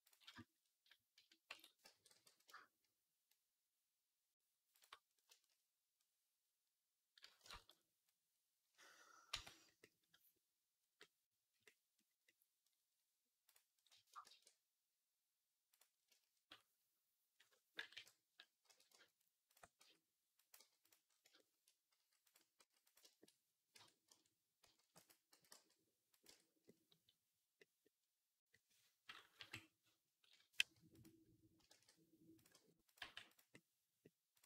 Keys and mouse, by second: 1.4 Tab, 1.7 a, 2.0 g, 7.3 ctrl+z, 9.1 Tab, 13.3 click, 13.4-17.7 middle drag, 14.1 shift+a, 17.7-20.8 drag, 17.8 KP_3, 18.5 r, 19.6 s, 20.4 g, 20.8-22.4 shift+middle drag, 21.8 s, 22.4 s, 23.6 Tab, 24.6 ctrl+r, 25.2 s, 26.1 Tab, 29.2 KP_3, 30.4 g, 31.6 shift+d, 32.4 r, 32.8 g, 34.2 click.